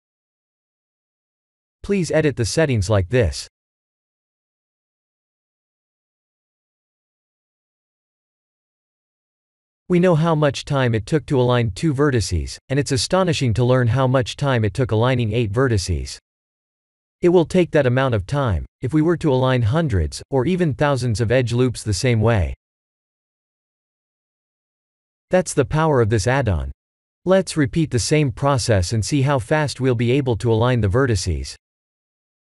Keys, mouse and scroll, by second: 2.5 click, 5.2 click, 9.5 click, 10.0 Tab, 10.5 middle click, 11.4 shift+z, 11.7-12.2 scroll down 5, 12.1 middle click, 12.2 middle click, 15.6 middle click, 15.7 middle click, 16.2 KP_1, 16.5 KP_7, 17.5 click, 27.7 x, 28.0 shift+a, 31.4-31.8 scroll up 2, 31.8 Tab.